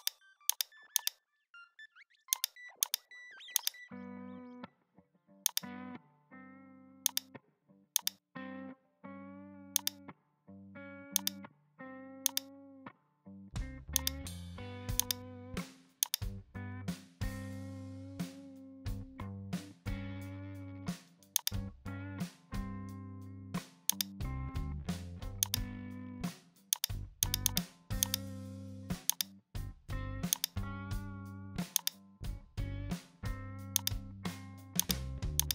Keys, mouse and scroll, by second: 0.0 right click, 1.0 shift+right click, 2.9 shift+right click, 3.6 shift+right click, 4.0 Tab, 4.9 ctrl+p, 6.2 Tab, 7.1 right click, 7.6 g, 8.2-8.9 middle drag, 8.9 g, 10.0 middle drag, 10.2 KP_1, 11.1 click, 11.9 g, 12.7 r, 15.0 click, 15.3 middle click, 16.1 click, 16.6 KP_1, 17.1 shift+middle click, 18.2-19.7 shift+middle drag, 20.2 alt+g, 20.4 alt+r, 21.4 click, 22.0 r, 25.4 click, 26.1 shift+middle drag, 26.2-26.7 scroll up 1, 26.7 right click, 27.2 right click, 28.1-29.2 drag, 29.4 Tab, 29.7 Tab, 30.4 right click, 31.8 shift+right click, 32.3 Tab, 33.3 ctrl+p, 34.1 Tab, 34.8 Right, 35.4 Left, 35.4-35.5 drag.